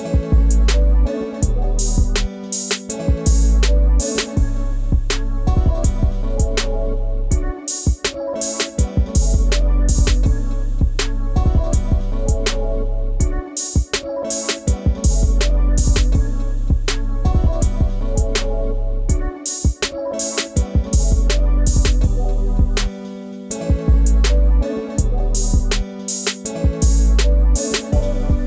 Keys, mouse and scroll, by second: 3.2 ctrl+shift+], 4.4 Down, 5.0-5.4 scroll down 1, 6.0-7.4 scroll up 1, 10.1 double click, 12.8-14.7 scroll down 1, 15.5 scroll up 1, 15.7 scroll down 1, 16.2 scroll up 1, 17.0 ctrl+space, 18.1 scroll up 1, 18.3 ctrl+space, 18.5 ctrl+click, 18.6 ctrl+space, 21.1 ctrl+space, 21.2 ctrl+click, 21.4 ctrl+space, 21.8-23.1 scroll down 1, 26.9 right click.